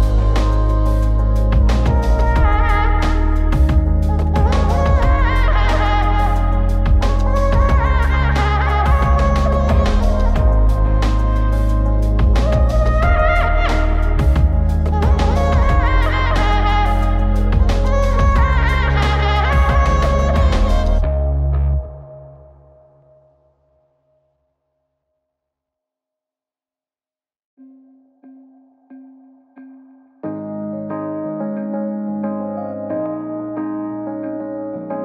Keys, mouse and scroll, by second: 0.2 click, 1.5 scroll down 2, 1.6-3.0 scroll up 2, 3.0 click, 4.0 click, 4.4-4.9 scroll down 1, 6.5 click, 7.4 click, 8.5-16.4 drag, 19.3-19.6 drag, 22.1 click, 22.9 scroll down 2, 23.0 click, 23.7 click, 25.5-26.2 scroll down 2, 26.5 click, 27.0 scroll up 4, 27.2 click, 27.3 scroll down 2, 28.0-30.5 drag, 30.8 g, 30.8 x, 32.8 click, 34.3-35.0 drag.